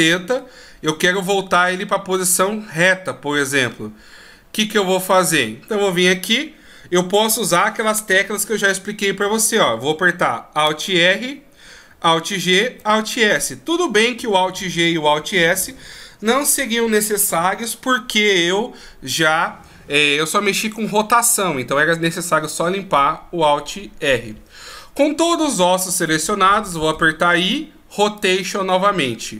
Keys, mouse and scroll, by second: 11.2 alt+r, 12.2 alt+g, 12.9 alt+s.